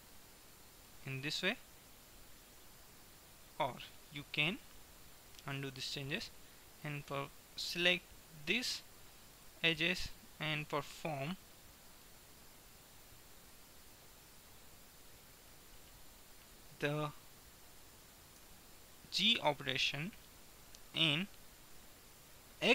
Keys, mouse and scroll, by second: 0.4-1.5 middle drag, 1.5 KP_1, 2.4-4.7 middle drag, 5.7 ctrl+z, 6.9-8.5 right drag, 8.7-10.0 drag, 10.0-11.4 middle drag, 13.5-15.4 middle drag, 18.5 g.